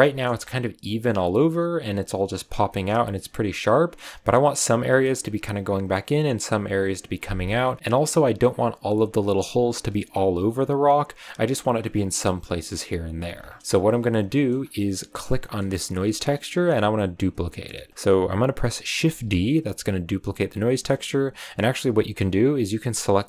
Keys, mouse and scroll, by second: 0.2 scroll up 2, 2.6-5.6 shift+middle drag, 7.1 scroll down 1, 7.6 shift+middle drag, 7.8-8.4 scroll up 2, 13.3-13.6 scroll down 4, 13.6 middle click, 13.6 a, 13.9 scroll up 1, 13.9 a, 14.3 middle click, 14.5-15.2 scroll up 1, 15.2 right click, 15.3 middle click, 15.5-16.2 scroll up 3, 16.2-17.3 middle drag, 17.3 scroll down 1, 17.4-19.0 middle drag, 19.0 shift+d, 21.9 x, 23.0 click.